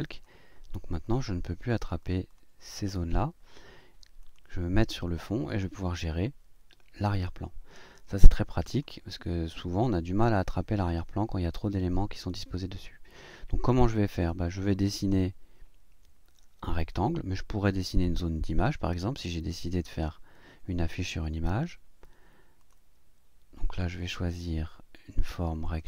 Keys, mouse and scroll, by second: 0.1 click, 1.0 click, 1.6 click, 2.0 click, 4.2 click, 8.7 click, 22.6 click, 24.0 click, 25.6 click.